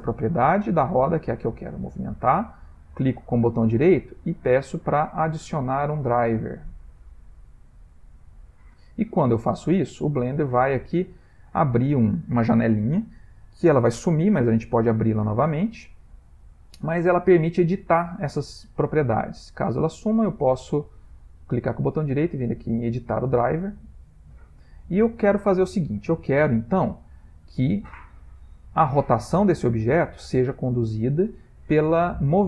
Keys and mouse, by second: 3.1 right click, 20.2 right click.